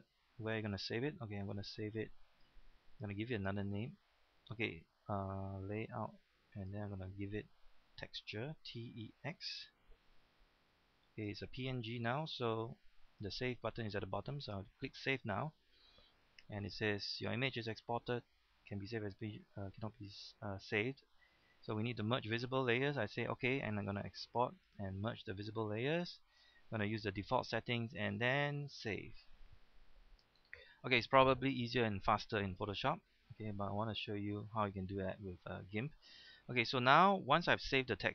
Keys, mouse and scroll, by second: 8.7 t, 8.9 e, 9.2 x.